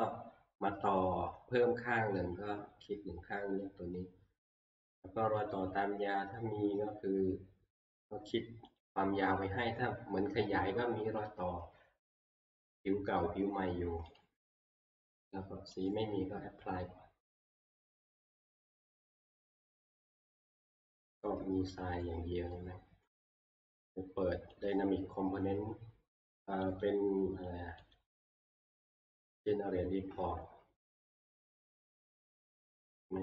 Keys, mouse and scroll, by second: 4.6 click, 5.5 click, 8.8 click, 14.2 click, 15.9 click, 17.6 click, 20.2-20.9 scroll, 22.0 scroll, 23.0 middle click, 23.1 middle click, 24.7 click, 26.8 click, 28.0 click, 31.2-31.7 scroll, 31.9 middle click.